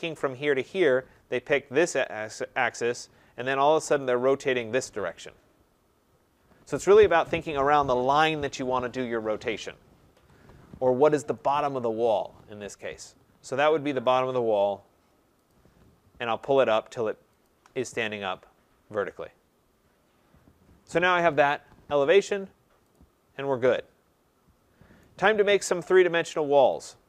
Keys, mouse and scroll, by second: 2.0 click, 4.0 click, 10.1 Escape, 11.4 right click, 12.8 click, 14.2 click, 15.5 click, 17.4 shift+click, 22.1 right click, 22.9 click, 25.0 right click, 25.2-26.0 scroll, 26.7 click.